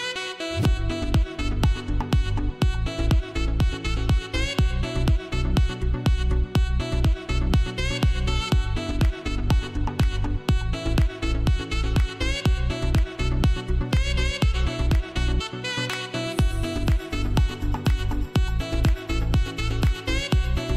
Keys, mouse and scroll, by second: 1.1-1.7 scroll down 1, 4.8-5.1 scroll down 1, 7.9 ctrl+j, 9.0 click, 14.8 click.